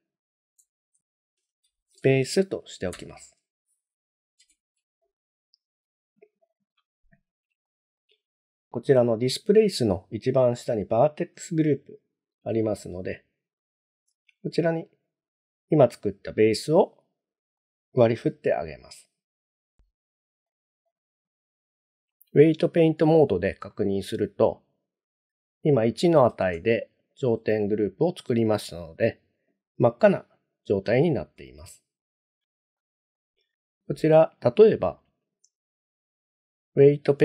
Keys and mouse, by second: 4.4 Tab, 6.6 click, 7.7 shift+middle click, 13.7-16.5 drag, 17.6-18.0 middle drag, 18.6 shift+middle click, 20.5 click, 21.0-23.0 drag, 23.7 middle click, 26.7 shift+middle click, 32.8 shift+middle click, 35.9-36.9 drag.